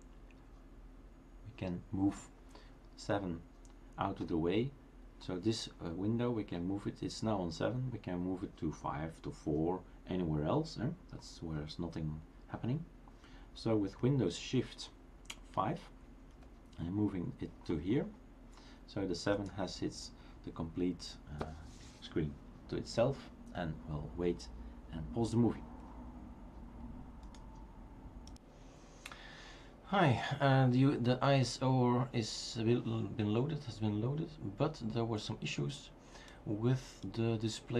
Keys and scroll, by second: 16.1 shift+super+5.